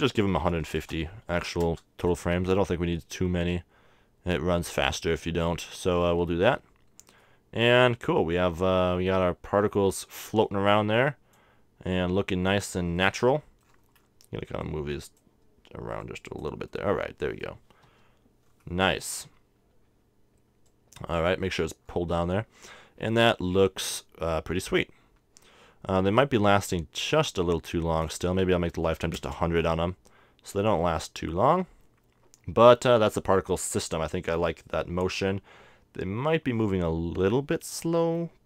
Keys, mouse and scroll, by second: 7.0-10.2 middle drag, 11.0-12.7 drag, 13.0-14.6 middle drag, 14.6-17.8 drag, 16.8 middle click, 18.0 KP_0, 19.0 z, 20.7-22.4 drag, 21.5 middle click, 28.1-29.7 drag, 29.0 0, 36.6-38.4 middle drag.